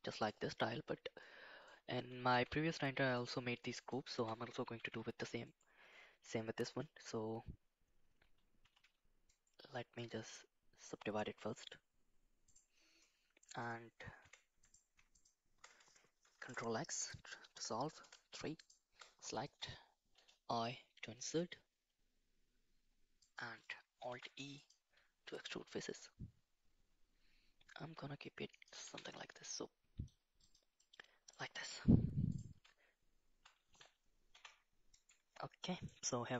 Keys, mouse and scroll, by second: 0.1 middle click, 1.2 middle click, 2.3 Tab, 3.2 click, 3.8 alt+click, 4.9 shift+d, 10.0-12.7 right drag, 14.2 2, 14.6 click, 15.2 click, 16.5 ctrl+x, 18.0 3, 20.4 i, 24.1 alt+e, 28.9 Tab, 29.5 middle click, 30.8 middle click, 32.3 click, 34.3 g, 35.6 middle click.